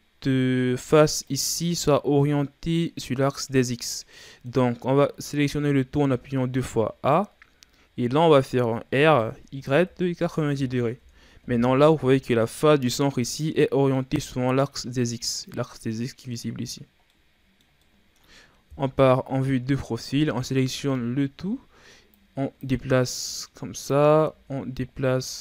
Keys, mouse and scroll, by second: 1.3 right click, 2.0 scroll down 1, 2.2-5.1 middle drag, 5.1 a, 5.6 a, 8.9 r, 11.8 scroll down 1, 12.1-13.2 middle drag, 13.2 right click, 13.6-16.6 middle drag, 17.1-18.7 middle drag, 18.7 KP_3, 19.6-20.2 scroll up 4, 20.2 a, 20.6 a, 22.1-23.3 drag, 24.2 s.